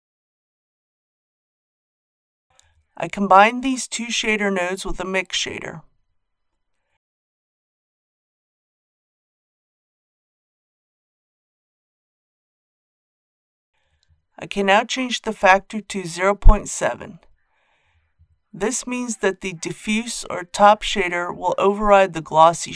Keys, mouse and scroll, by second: 3.1 shift+a, 5.0-15.7 drag, 15.7 KP_Decimal, 16.0 KP_7, 20.8-22.7 middle drag.